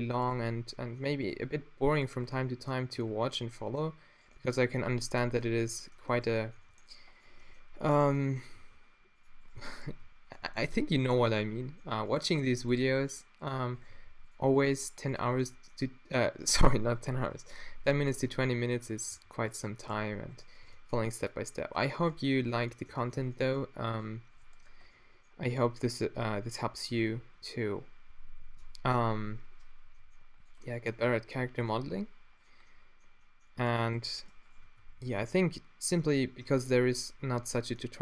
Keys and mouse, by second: 0.2 click, 0.3 middle drag, 2.8 f, 6.5 g, 7.9-8.6 middle drag, 8.6 g, 9.2-10.5 drag, 9.9 g, 10.5-11.3 middle drag, 11.3-12.7 drag, 12.0 g, 12.7 middle click, 12.9-13.9 drag, 12.9 g, 13.9 g, 14.6 g, 15.5-16.5 middle drag, 16.5-17.8 drag, 18.4-19.1 middle drag, 19.1 g, 20.0 g, 20.7 g, 25.6 shift+space, 29.9 e, 31.2 g, 33.6-34.3 drag, 33.6-34.3 right drag, 34.8 f, 36.0 Tab, 36.4 Tab.